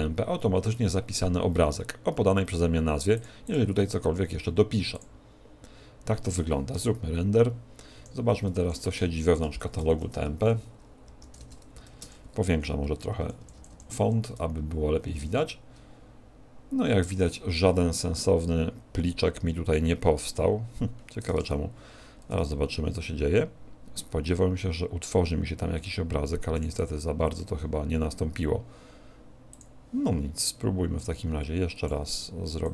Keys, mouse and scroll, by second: 8.1 F12, 21.4 F12, 29.7 click.